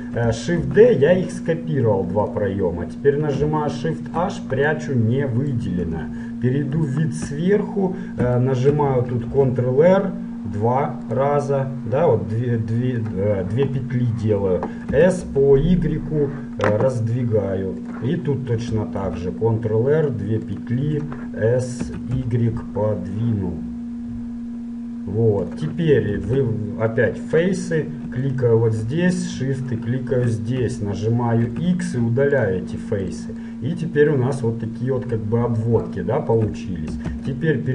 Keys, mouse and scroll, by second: 0.6 shift+d, 3.9 shift+h, 4.7-10.2 middle drag, 5.9 KP_7, 9.4 ctrl+r, 13.9-18.0 middle drag, 15.1 s, 19.1 ctrl+r, 21.9 s, 26.2 ctrl+Tab, 28.3-31.6 right drag, 31.5 x, 33.2-35.3 middle drag, 36.1-37.7 middle drag, 37.1 ctrl+Tab.